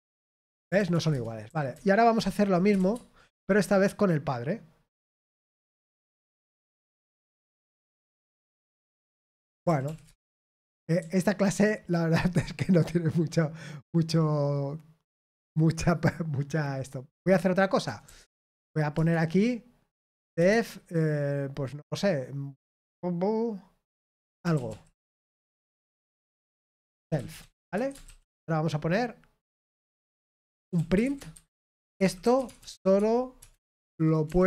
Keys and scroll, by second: 0.7 ctrl+p, 0.9 ctrl+p, 1.1 Return, 1.4-8.1 typing, 8.2 Return, 9.6 ctrl+p, 9.8 ctrl+p, 10.0 Return, 11.7 typing, 18.9 Return, 26.8-28.5 typing, 31.0-34.4 typing.